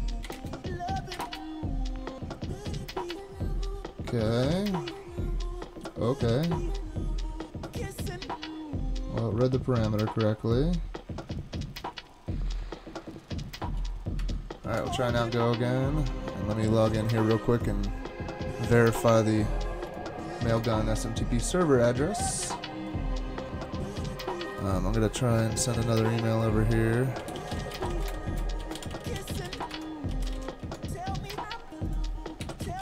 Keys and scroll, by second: 0.3-1.2 typing, 13.6 super+k, 14.2 super+Tab, 14.8 super+Tab, 20.6 ctrl+Tab, 26.9-31.1 typing, 32.2-32.8 typing.